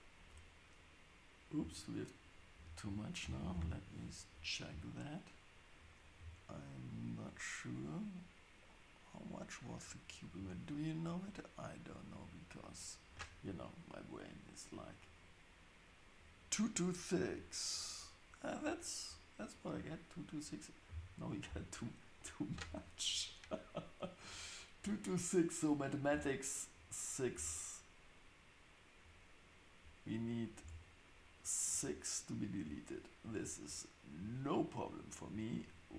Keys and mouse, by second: 3.5 ctrl+space, 9.8 click, 12.6 click, 17.7 click, 18.6 click, 26.1 Tab, 27.3 Tab, 30.1 click, 30.6 Tab.